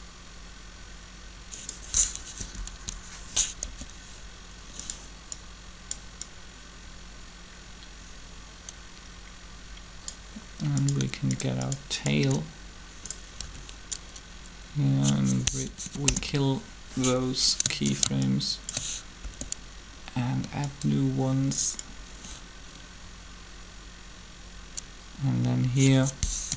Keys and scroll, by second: 2.3 Up, 2.5 Up, 2.6 Up, 4.8 r, 13.4 shift+b, 15.7 Delete, 15.9 Return, 19.2 ctrl+shift+r, 26.4 7.